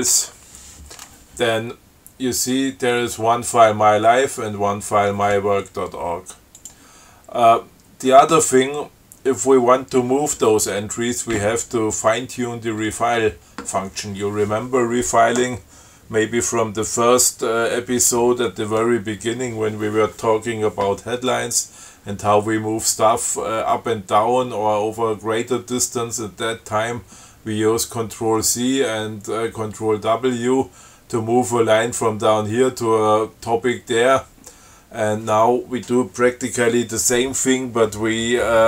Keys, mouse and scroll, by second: 0.0-0.2 typing, 0.4 Return, 6.8 click.